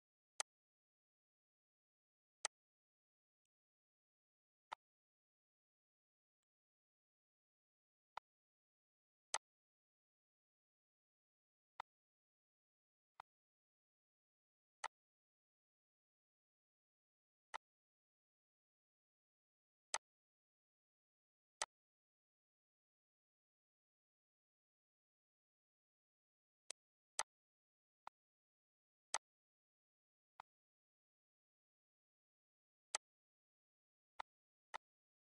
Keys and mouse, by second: 0.8 click, 1.9 click, 3.3 click, 5.5 click, 7.4 click, 9.1 click, 13.9 click, 15.3 click, 16.4 click, 17.5 click, 19.6 click, 20.6 click, 21.9 click, 22.8 click, 23.9 click, 26.8 click, 29.7 click, 31.7 click, 32.4 click, 33.2 click, 33.7 click, 34.9 click.